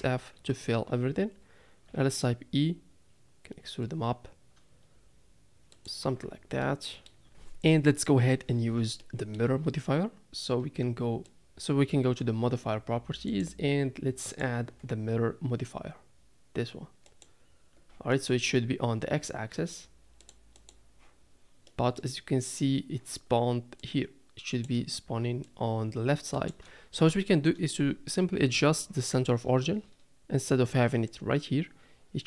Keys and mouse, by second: 0.0 f, 1.9 e, 6.0 Tab, 6.6-7.1 middle drag, 9.0 middle drag, 11.4 click, 13.3 click, 14.3-17.2 drag, 18.1 shift+middle click, 20.2 click, 20.5 click, 21.6-22.0 middle drag, 23.9-24.7 drag, 25.4-26.6 drag, 28.5 KP_7.